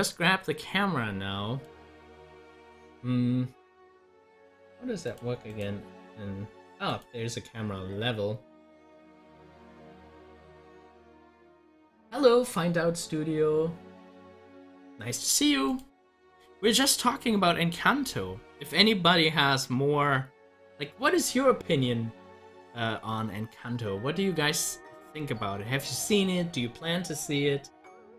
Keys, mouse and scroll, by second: 1.6 click, 5.1 click, 15.6 click.